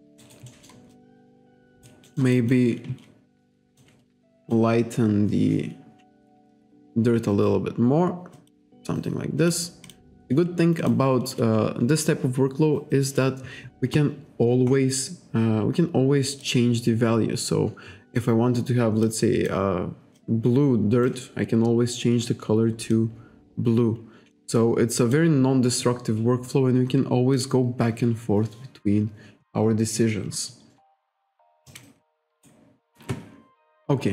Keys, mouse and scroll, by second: 0.3 alt+right click, 0.5 alt+middle click, 1.0 alt+click, 2.1 alt+middle click, 2.4 alt+click, 3.8 click, 4.5 click, 6.4 click, 8.4 click, 9.5 click, 9.9 click, 10.3 click, 10.9 click, 16.5 click, 19.1 click, 20.2 click, 23.0 click, 25.1 click, 27.4 click, 31.7 click, 32.4 alt+right click.